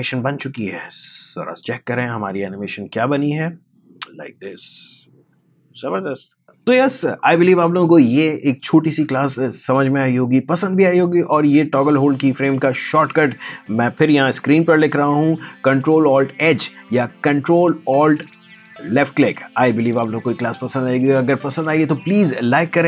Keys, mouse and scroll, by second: 0.4 space.